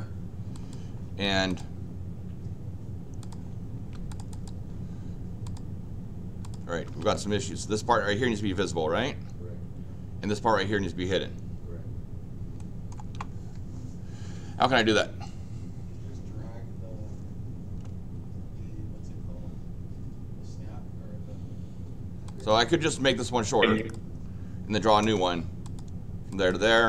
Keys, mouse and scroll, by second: 0.5 click, 1.5 click, 3.2 click, 3.7 Escape, 4.1 click, 4.3 click, 5.4 click, 6.4 click, 6.7 Escape, 6.9 Escape, 12.6 middle click, 22.3 click, 22.9 click, 23.7 click, 23.9 click, 24.8 l, 25.0 Return, 25.6 click, 26.3 click, 26.6 Return.